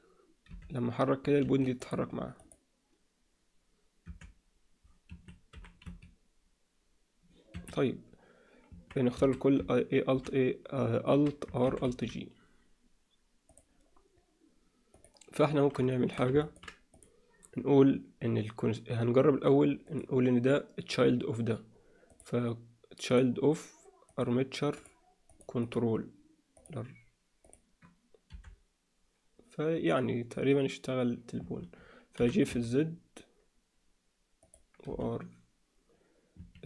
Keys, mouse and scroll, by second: 0.5 r, 1.8 click, 2.4 click, 4.1 r, 5.5 g, 9.1 a, 10.1 alt+r, 11.7 alt+r, 11.8 alt+g, 15.9 alt+shift+middle click, 16.4 ctrl+alt+middle drag, 16.9 click, 22.1-23.1 drag, 24.1 click, 25.6-26.7 drag, 28.3 r, 32.2 g, 34.9 r.